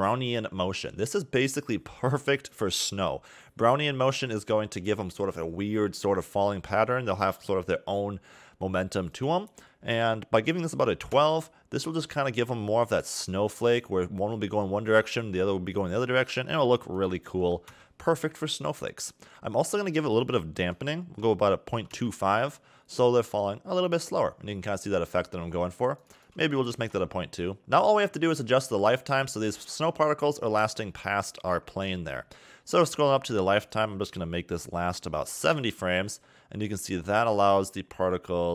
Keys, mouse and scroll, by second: 8.9 click, 16.7 click, 20.2 click, 25.8 click, 27.6-30.3 scroll up 4, 30.3-31.1 scroll up 1, 31.3-33.4 scroll up 14, 33.4 click.